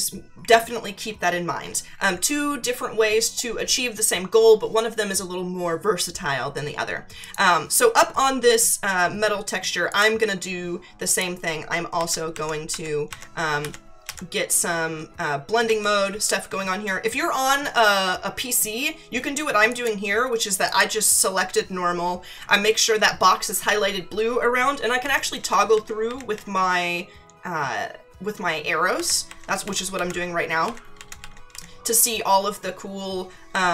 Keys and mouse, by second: 7.2 click, 9.9 click, 11.1 click, 12.0 Down, 15.6 Down, 19.7 click, 25.0 Down, 28.9 Down, 33.5 Up.